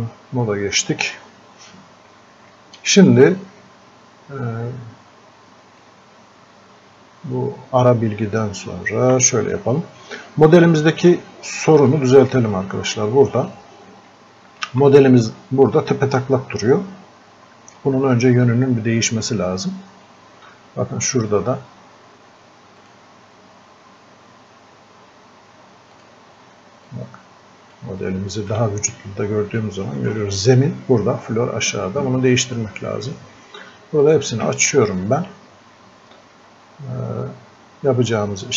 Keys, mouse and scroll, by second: 5.8-11.1 drag, 11.7 click, 11.9-17.4 alt+drag, 21.1 click, 26.0-28.9 drag, 28.9-29.5 scroll up 1, 29.6-34.0 alt+drag, 34.0 click.